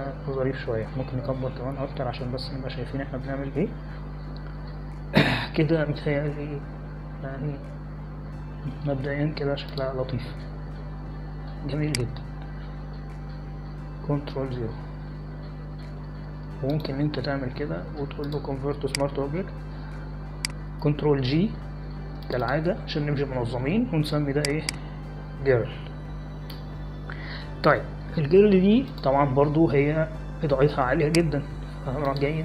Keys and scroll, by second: 1.5 Right, 1.9 Down, 3.7 ctrl+=, 4.1 ctrl+=, 4.3 ctrl+=, 4.5 ctrl+=, 5.1 ctrl+=, 8.7 Up, 9.7 Down, 16.1 ctrl+0, 23.3 ctrl+g, 26.3-27.7 typing, 28.5 Return.